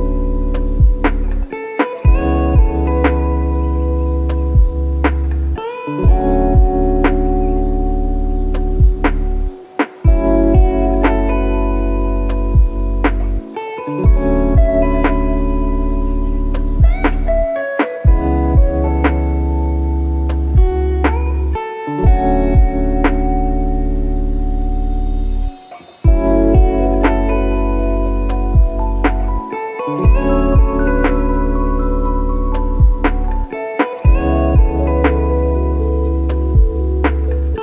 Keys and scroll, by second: 9.2 ctrl+alt+KP_0, 19.0 ctrl+d, 30.1 F1, 32.0 F1.